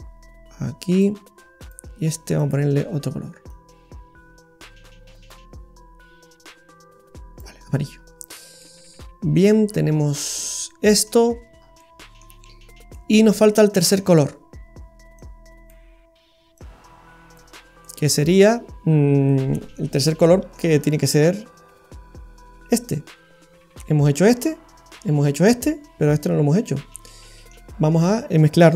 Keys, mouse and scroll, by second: 1.6 click, 2.3 click, 7.7-9.5 scroll down 6, 8.6 middle click, 11.3-11.7 scroll down 5, 11.7 scroll up 1, 11.7 middle click, 12.6 scroll down 1, 12.9 middle click, 15.1 click, 16.6 click, 17.8 middle click, 19.3 middle click, 20.2 middle click, 26.9 middle click.